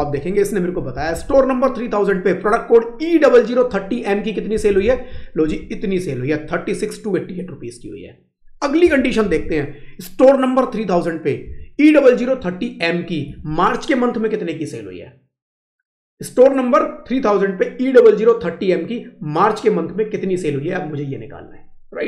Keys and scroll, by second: 0.8 Left, 4.4 Right, 5.3 Left, 8.7 Down, 9.0 Left, 11.3 Right, 13.1 Right.